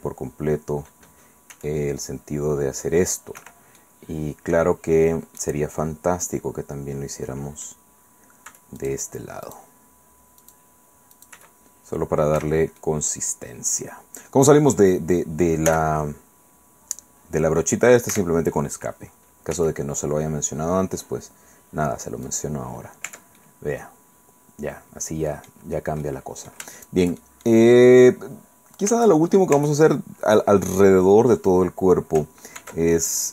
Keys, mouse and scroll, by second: 1.5 s, 3.4 Escape, 3.8 click, 5.4-7.8 drag, 8.5 c, 8.8 click, 9.4 click, 10.4 click, 11.1 click, 11.3 c, 12.4 Escape, 12.8-14.7 drag, 15.7 c, 18.1 Escape, 19.5 s, 22.2 click, 23.0 Tab, 23.4-26.7 drag, 26.8 shift+click, 29.5 Tab, 32.6 ctrl+r.